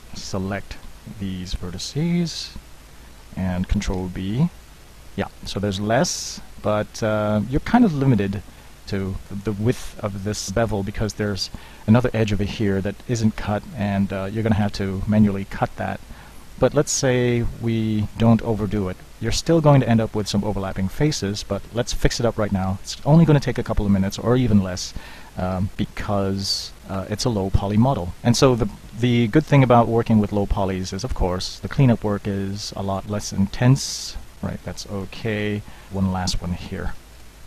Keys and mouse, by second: 0.1 space, 0.3 c, 2.7 z, 4.0 ctrl+b, 8.9 ctrl+b, 14.6 ctrl+b, 22.7 alt+m, 24.0 right click, 25.6 alt+m, 28.2 alt+m, 28.5 shift+click, 29.1 alt+m, 33.1 alt+m, 37.2 alt+m.